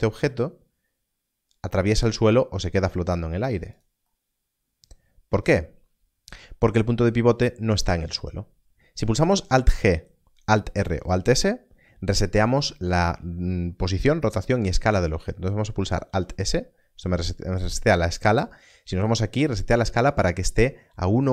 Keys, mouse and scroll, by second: 3.7 click, 15.8 alt+s, 18.5 n.